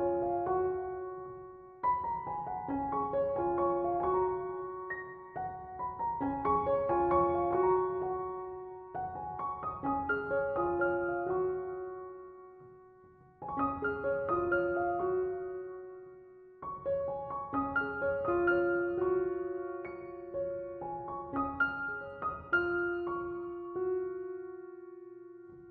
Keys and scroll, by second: 3.7 BackSpace, 18.2 BackSpace.